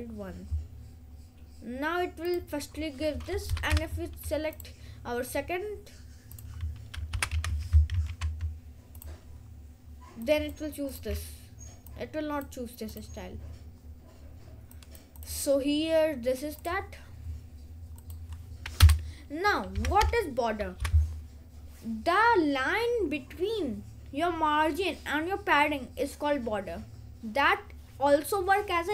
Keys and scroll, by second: 7.2 BackSpace, 7.4 BackSpace, 8.0 ctrl+s, 19.0 Return, 19.7 b, 20.9 BackSpace.